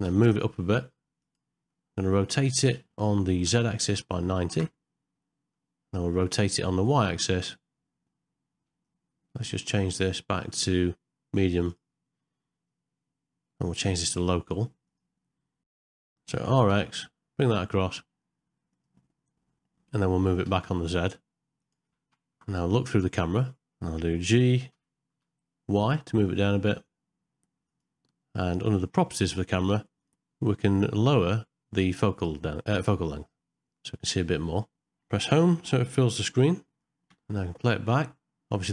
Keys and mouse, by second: 0.1 g, 1.7 middle click, 5.5 middle click, 10.1-11.8 drag, 14.1-15.2 drag, 15.9 middle click, 22.3 KP_0, 30.7 middle click, 32.4-34.8 drag, 36.7 Home, 37.1 space.